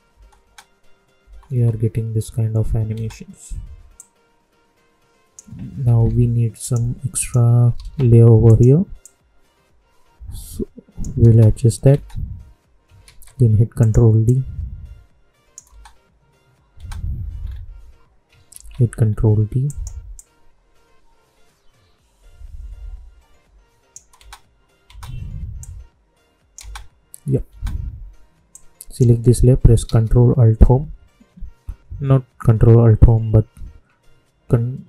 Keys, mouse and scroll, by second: 0.0 space, 3.9 click, 5.8 =, 6.5 click, 7.7 ctrl+d, 8.4-11.2 drag, 11.2 space, 13.0 ctrl+d, 13.7-15.7 drag, 15.7 space, 17.3-18.2 scroll down 1, 18.5 ctrl+d, 19.0 scroll down 1, 19.6-24.1 drag, 24.1 space, 25.5 click, 26.5 space, 28.5-29.8 drag, 29.8 ctrl+a.